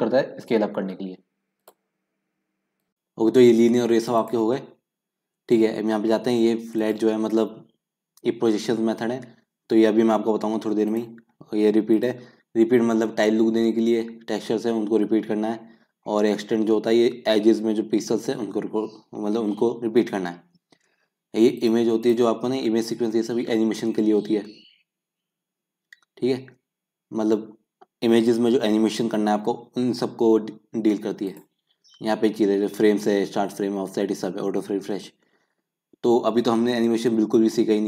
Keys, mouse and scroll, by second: 2.8 middle click, 21.6-37.8 drag.